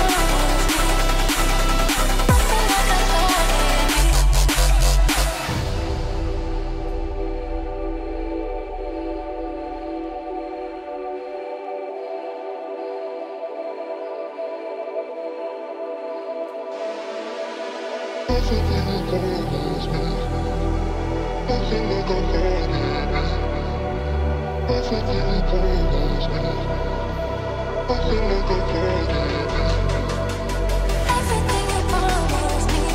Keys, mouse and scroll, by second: 3.1 double click, 3.6 Return, 9.1 shift+Page_Up, 14.4-16.0 scroll down 1, 18.6 double click, 22.6 shift+F2, 23.8 End, 24.6 double click, 25.6 F2, 26.5 ctrl+k, 31.6 shift+click, 32.4 ctrl+g.